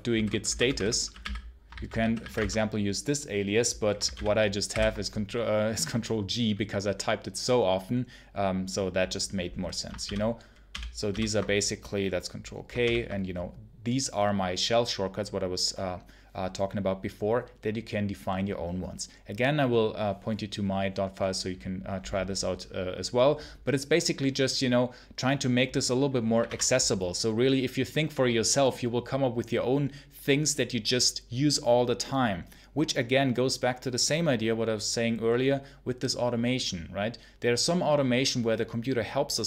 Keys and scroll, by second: 0.0-2.6 typing, 3.9 ctrl+c, 4.0 ctrl+l, 4.6 ctrl+g, 9.9 ctrl+k, 10.6 ctrl+l, 11.0 ctrl+k, 12.7 ctrl+l, 26.0-26.8 typing.